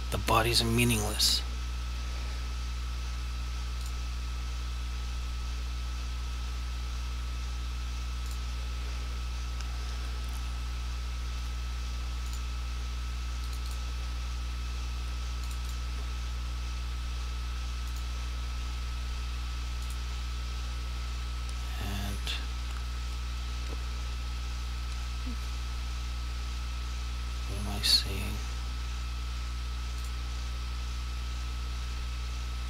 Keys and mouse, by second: 3.9 click, 8.3 click, 12.4 click, 30.1 click.